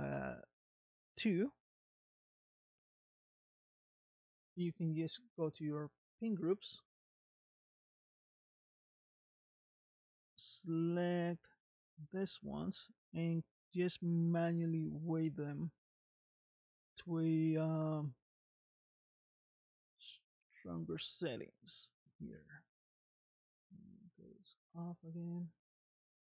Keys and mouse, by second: 0.7 middle click, 2.2 middle click, 18.9-21.5 drag, 25.2 click, 25.8 middle click.